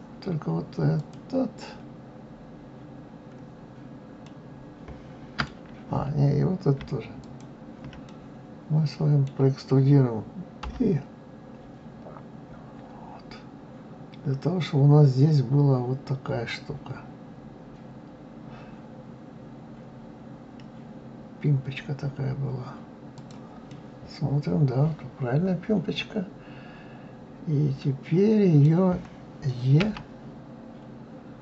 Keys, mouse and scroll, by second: 4.2-7.2 middle drag, 7.2 shift+click, 8.0-10.6 middle drag, 23.7-26.7 middle drag, 29.8 e.